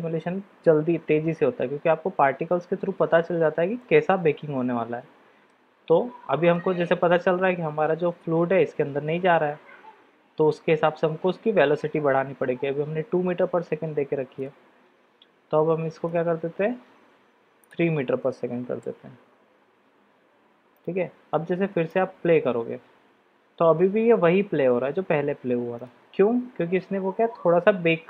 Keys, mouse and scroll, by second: 3.8-5.5 middle drag, 5.9-6.5 middle drag, 14.5-19.5 drag, 21.8 click, 25.9 click.